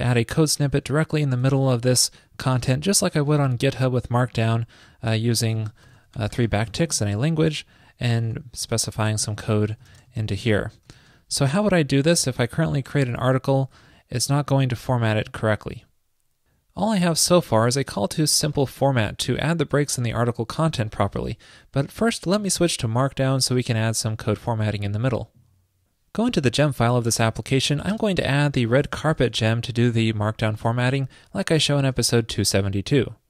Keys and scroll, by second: 27.4 super+Return, 32.0 super+s.